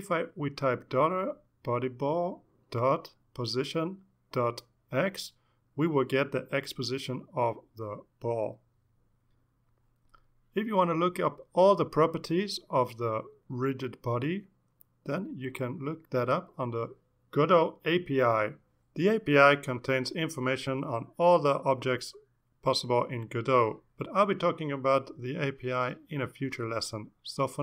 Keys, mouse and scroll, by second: 10.6 Down, 11.4 space, 11.7 =, 12.0 space, 13.4-21.0 typing, 22.2 Return.